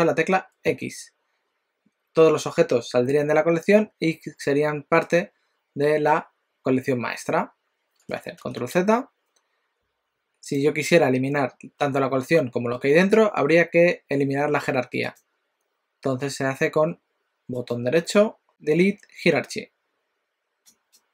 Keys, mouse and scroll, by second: 8.5 ctrl+z, 10.5 click, 15.3 click, 17.5 right click.